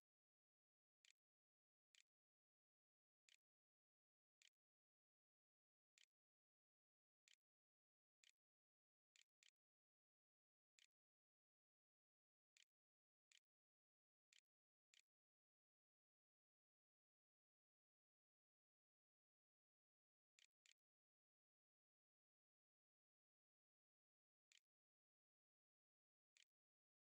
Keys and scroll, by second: 0.0-3.3 typing, 4.4-9.2 typing, 10.6 Tab, 11.2-12.4 typing, 12.8 Return, 13.5 shift+Return, 13.8-15.9 typing, 14.5 Return, 19.3-21.5 typing, 23.0-27.0 typing, 24.3 Return.